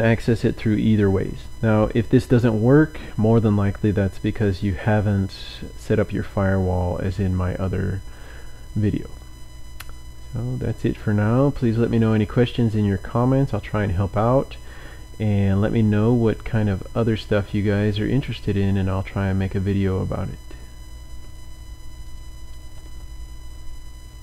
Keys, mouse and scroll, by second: 10.7 click, 12.0 click, 14.1 click, 21.8 click.